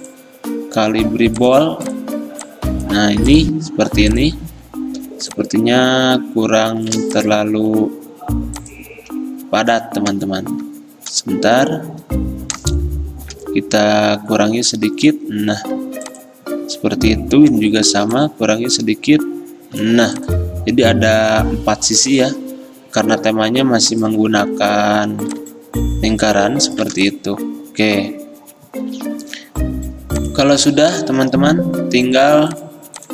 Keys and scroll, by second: 31.4 d.